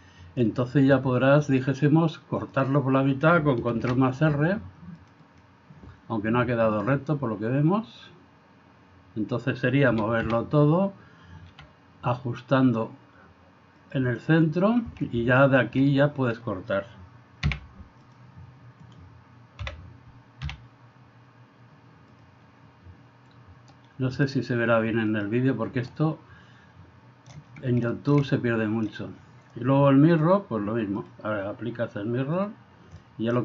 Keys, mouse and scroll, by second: 1.5-2.7 drag, 3.8 ctrl+r, 6.8 click, 10.0 a, 10.3 a, 11.6 r, 15.5 alt+right click, 15.9 middle click, 17.5 v, 18.8 right click, 19.6 l, 20.5 x, 24.2 click, 25.1 click, 26.1-27.3 middle drag, 28.0 shift+middle click, 28.3 middle click, 30.2 click, 31.0-32.6 drag, 33.0 middle click.